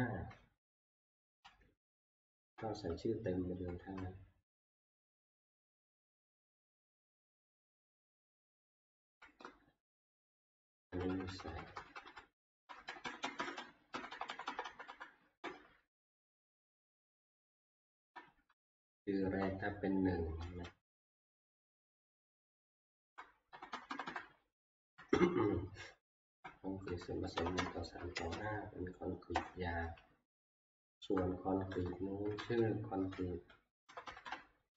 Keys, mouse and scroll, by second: 1.6 Left, 2.1 Left, 2.1 Left, 2.2 Left, 2.4 Left, 2.4 Right, 2.5-3.6 Left, 3.8 Left, 9.1 Left, 9.4-10.3 Left, 10.5 Left, 10.7 Left, 10.9 Left, 11.1 Left, 11.3 Left, 11.5 Left, 11.7 Left, 11.8 Left, 12.0 Left, 12.7 ctrl+shift+Right, 12.9 ctrl+shift+Right, 13.2 ctrl+shift+Right, 13.3 ctrl+shift+Right, 13.4 ctrl+shift+Right, 13.9 Right, 14.1 Right, 14.3 Right, 14.5 Right, 14.7 Right, 14.9 Right, 15.4 Right, 16.1 ctrl+x, 16.7-18.2 Right, 18.5-19.4 Left, 20.5 ctrl+v, 21.8 Left, 22.3 Left, 22.4 Left, 22.6 Left, 22.8 Right, 23.5 Right, 23.7 Right, 23.9 Right, 24.1 Right, 24.7 Delete, 25.1-29.3 typing, 30.1-31.1 Left, 31.7 Right, 32.3 t, 32.4 ctrl+shift+Right, 32.4 BackSpace, 32.9 Right, 33.1 ctrl+c, 33.9 ctrl+shift+Right, 34.0 ctrl+shift+Right, 34.3 ctrl+shift+Right.